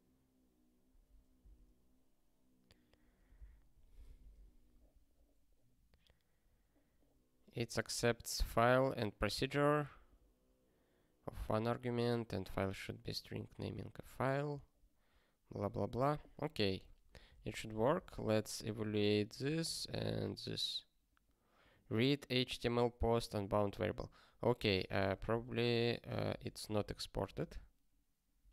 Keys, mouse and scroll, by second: 0.9 ctrl+p, 2.5 alt+., 3.3 super+w, 16.6 click, 17.0 ctrl+p, 17.7 ctrl+p, 18.2 ctrl+e, 19.3 click, 24.8 super+o, 25.1 super+b, 26.1 super+b, 26.2 super+b.